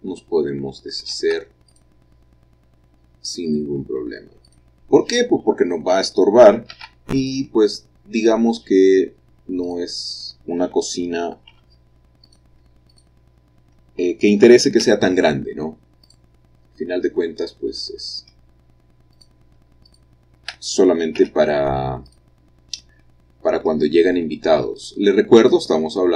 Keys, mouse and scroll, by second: 1.2 ctrl+r, 1.8-2.8 drag, 4.5 click, 7.3-8.3 drag, 11.6 3, 12.3 click, 13.0 shift+click, 14.9 x, 16.1 click, 19.2 click, 19.9 shift+click, 21.2 x, 22.1 click, 23.2-24.7 middle drag, 24.8 click.